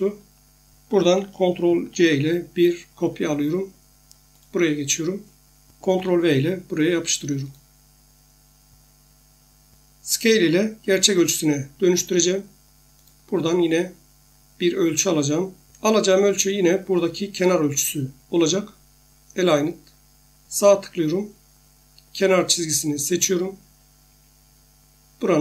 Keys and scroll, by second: 1.9 ctrl+c, 5.8 ctrl+v.